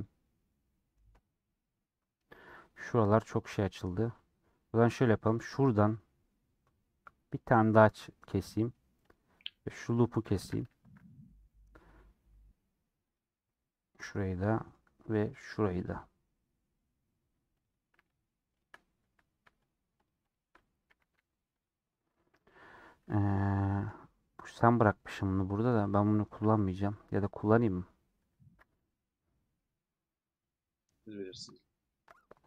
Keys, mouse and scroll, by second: 2.1-4.8 middle drag, 4.8 alt+click, 7.4 middle click, 8.3 scroll up 1, 8.5-9.0 scroll down 1, 9.0-10.1 drag, 10.3 a, 12.2 scroll up 3, 13.0 click, 13.8 scroll down 2, 14.0-15.7 middle drag, 15.7-20.5 drag, 20.8 a.